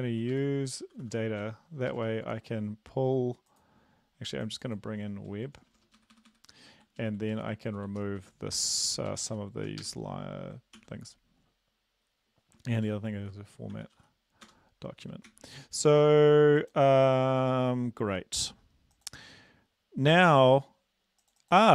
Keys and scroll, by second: 0.3 ctrl+Right, 0.6-2.0 typing, 5.5 BackSpace, 5.6 BackSpace, 5.8 BackSpace, 6.0 Delete, 6.2 Delete, 6.3 Delete, 6.6 Down, 6.7 Down, 6.8 Down, 7.0 Down, 7.2 Down, 7.6 Down, 7.7 Down, 7.9 Down, 8.8 Home, 9.1 ctrl+shift+Right, 9.3 ctrl+shift+Right, 9.8 BackSpace, 10.8 ctrl+s, 12.9 ctrl+p, 13.7-14.5 typing, 15.3 ctrl+s, 17.0 ctrl+s.